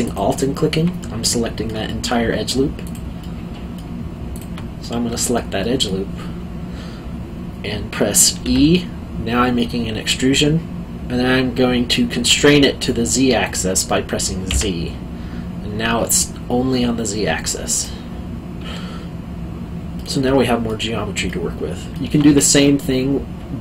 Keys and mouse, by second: 0.0 alt+click, 1.0 middle click, 1.8 alt+middle click, 2.8 alt+click, 3.2 middle click, 4.3 alt+click, 4.8 middle click, 8.4 e, 14.5 z, 17.7 click, 19.9 alt+middle click.